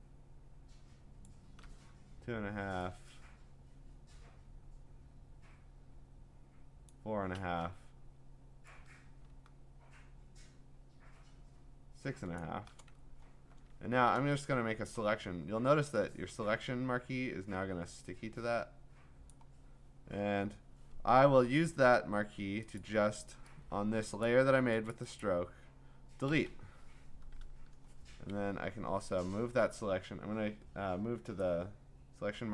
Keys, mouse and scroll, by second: 1.2 shift+click, 6.9 shift+click, 16.9 click, 19.3 click, 21.1-22.1 scroll, 22.8 click, 24.4 click, 24.9 click, 25.2 click, 26.3 Delete, 28.5 v, 31.4 click.